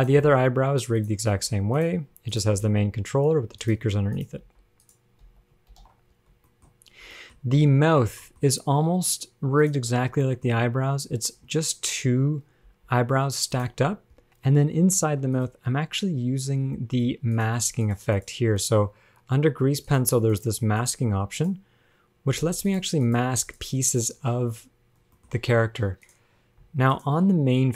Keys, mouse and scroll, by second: 0.0 g, 0.4 shift+middle click, 1.2 click, 1.7 scroll down 1, 1.8 g, 2.6 click, 2.9 g, 4.4 click, 4.6 g, 5.4 a, 5.9 alt+r, 6.0 alt+g, 6.4 scroll down 2, 7.4 shift+middle click, 7.7-9.0 scroll up 10, 8.5 shift+middle click, 9.9 click, 10.2 scroll down 4, 10.5 shift+middle click, 10.8-11.4 scroll up 2, 12.9 g, 14.3 click, 15.3 ctrl+Tab, 15.6 click, 17.6 click, 18.1 click, 18.4 click, 18.8 click, 20.1 click, 20.6 click, 21.0 click, 21.6 click, 22.9 click, 23.3 click, 23.7 click, 24.1 click, 24.7-25.2 scroll down 4, 25.4 shift+middle click, 25.5 scroll up 2, 26.3 click, 26.9 ctrl+Tab, 27.1 click.